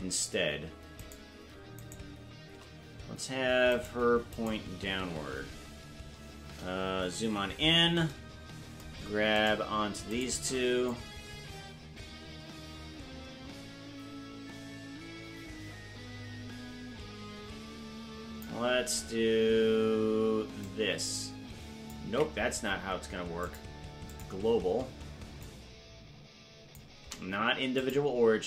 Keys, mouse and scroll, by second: 1.0 shift+right click, 7.1 KP_Decimal, 9.4 shift+right click, 10.3 shift+right click, 10.9-18.4 drag, 20.6-21.9 drag, 22.5 ctrl+z, 23.4 click, 25.4-26.8 drag, 27.4 ctrl+z, 27.7-28.4 drag.